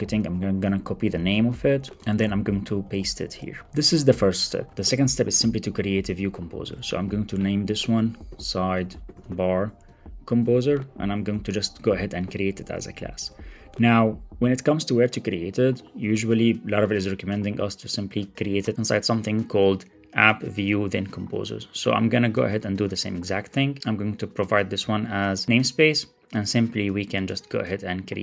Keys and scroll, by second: 0.1 super+c, 0.9 alt+Down, 1.7 Left, 2.0 shift+super+Right, 2.4 ctrl+Tab, 3.6 super+v, 6.7 Right, 7.1 alt+shift+Left, 11.3 alt+Return, 12.9 Return, 22.4 super+c, 23.8 super+z, 24.8 super+v.